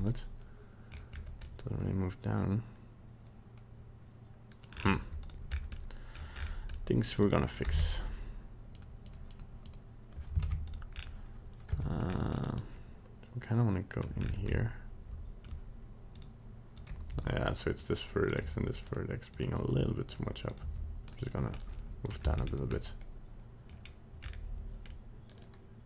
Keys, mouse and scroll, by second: 1.1 scroll up 1, 1.5 middle click, 4.6 middle click, 4.7-5.2 scroll down 5, 5.2 right click, 5.5 scroll up 3, 5.8 middle click, 6.3-6.7 scroll up 3, 6.8 middle click, 7.1 middle click, 7.2 right click, 8.7 click, 9.0 click, 9.3 click, 9.6 click, 10.4 ctrl+Tab, 10.7 right click, 10.9 scroll down 3, 11.8 Tab, 12.1 scroll up 2, 12.4 middle click, 14.2 middle click, 14.2 scroll up 3, 14.6 middle click, 16.2 right click, 16.8 right click, 17.1 g, 18.3 right click, 18.4 g, 19.3 right click, 19.6 g, 20.5 right click, 20.6 g, 21.6 middle click, 22.1 middle click, 22.3 Tab, 22.4 scroll down 2, 22.8 middle click, 23.8 scroll down 1, 24.2 scroll up 4, 24.9 middle click.